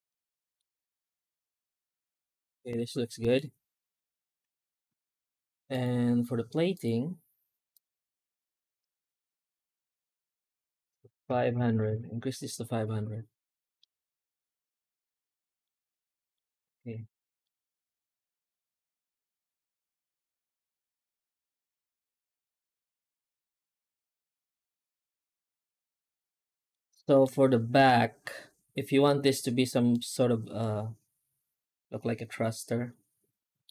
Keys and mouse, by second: 0.8-3.2 middle drag, 4.3 F9, 11.6 KP_0, 13.6-15.5 middle drag, 15.9-16.2 middle drag, 17.3-26.6 middle drag, 26.8 shift+middle drag, 29.8-33.5 middle drag.